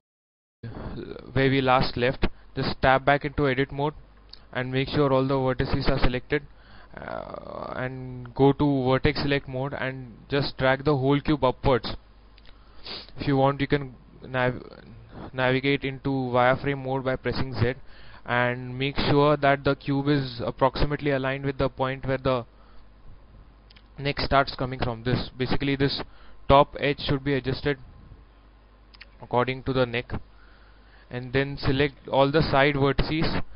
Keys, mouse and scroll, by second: 0.4 scroll up 1, 1.8 shift+middle click, 2.4 scroll up 1, 7.6-12.5 drag, 12.8 z, 16.3 scroll up 1, 17.7 shift+middle click, 25.5 a, 25.9 b, 26.6 click, 27.5-30.5 drag, 30.9 a, 31.8 b, 32.4-33.5 drag.